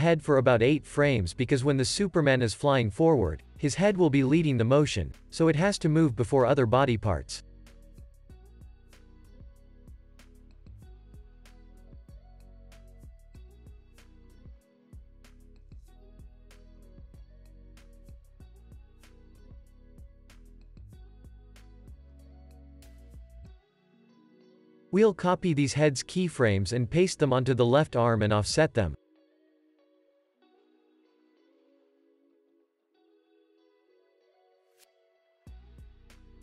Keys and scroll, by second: 4.2 alt+q, 4.4 space, 9.4 space, 9.6 super+s, 13.2 space, 24.6 space, 25.0 super+s, 26.5 super+c, 27.0 z, 29.9 super+v, 31.1 space, 33.6 space, 33.9 super+s, 34.6 space.